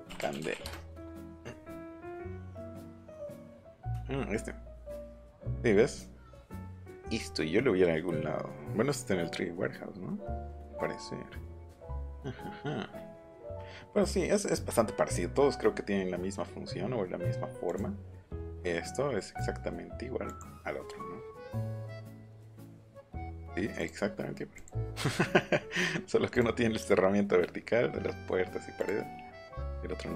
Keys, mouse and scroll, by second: 0.0-0.8 typing, 2.3 click, 10.1 scroll down 2, 20.2 click, 21.6 click, 22.4 click, 23.7 click, 24.5 click, 26.3 click, 28.2-28.8 scroll up 1, 28.8 click.